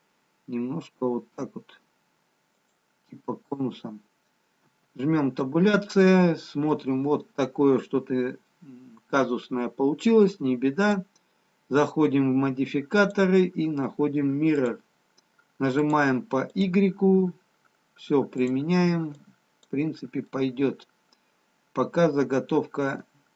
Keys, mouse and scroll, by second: 3.8-5.5 scroll down 1, 5.5 Tab, 5.5-5.9 scroll down 2, 11.6 click, 13.3 click, 15.7 click, 16.8 click, 18.4 click, 19.2 click, 20.3 middle click.